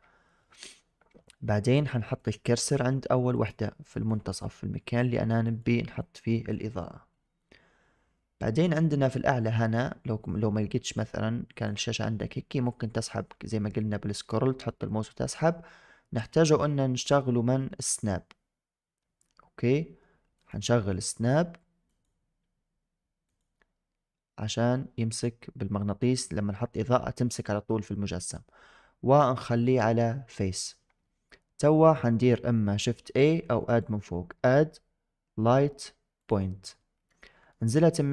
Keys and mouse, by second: 2.2 click, 3.2 click, 3.8 click, 5.3 click, 5.9 click, 10.9 click, 16.2 click, 20.2 click, 21.8 click, 28.2-30.0 drag, 33.5-36.2 drag, 37.6 shift+click.